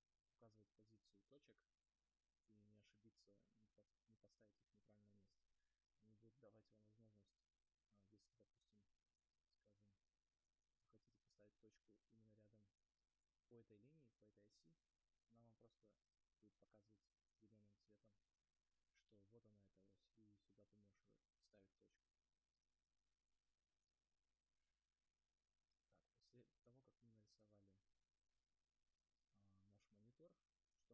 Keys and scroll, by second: 28.6 space, 29.4 space.